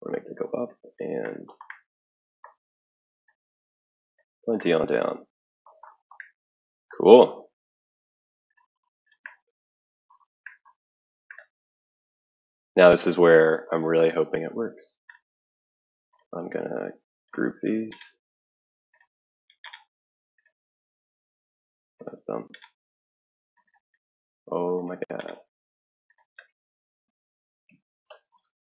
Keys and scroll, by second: 27.4-28.6 typing.